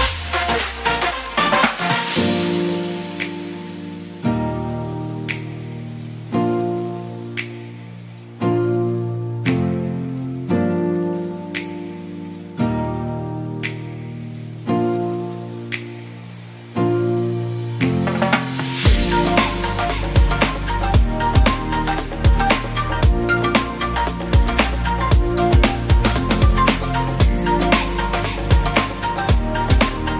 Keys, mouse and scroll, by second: 5.0 Return, 6.3 Return.